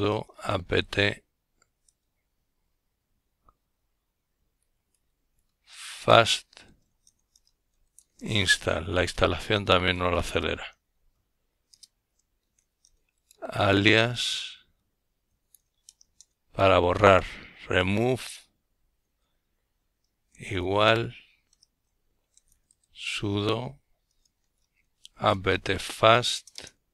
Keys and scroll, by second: 0.0-5.0 typing, 6.9 Return, 7.3-8.8 typing, 10.1-12.9 typing, 17.3-18.3 typing, 19.3-26.9 typing.